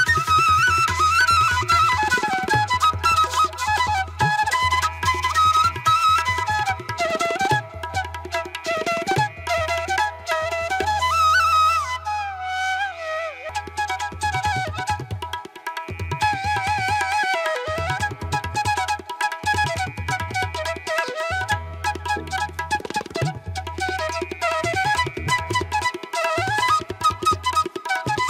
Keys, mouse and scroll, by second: 0.4 ctrl+alt+z, 7.5 ctrl+=, 7.8 ctrl+=, 8.0 space, 9.5 ctrl+alt+z, 11.1 space, 11.8 ctrl+alt+z, 14.5 space, 23.0 ctrl+alt+z, 25.4 ctrl+alt+z, 26.4 ctrl+-, 26.7 ctrl+-.